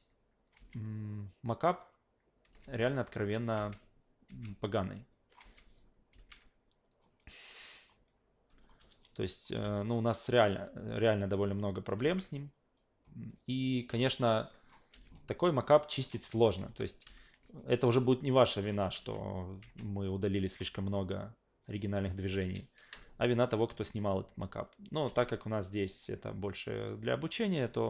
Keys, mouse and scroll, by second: 0.6 alt+v, 2.4 alt+v, 2.7-3.5 drag, 3.6 alt+v, 4.3 alt+v, 4.7-5.3 drag, 5.4 alt+v, 6.1 alt+v, 7.0 click, 8.6 click, 9.0-9.4 drag, 9.5 Delete, 11.0 click, 11.8 click, 12.0 alt+v, 13.3 alt+click, 13.9 alt+v, 14.0 alt+middle click, 14.3 alt+right click, 14.5 alt+click, 14.9 alt+v, 15.6 alt+right drag, 15.9 alt+middle drag, 16.3 alt+v, 16.7 q, 17.0 f, 17.5 alt+right click, 17.7 alt+right click, 18.1 alt+middle click, 18.5 alt+right click, 18.8 alt+middle click, 19.0 alt+v, 19.6 alt+v, 19.9 alt+right click, 20.5 click, 20.8 alt+right click, 21.0 alt+middle click, 21.6 alt+click, 24.9 click, 25.1 alt+v.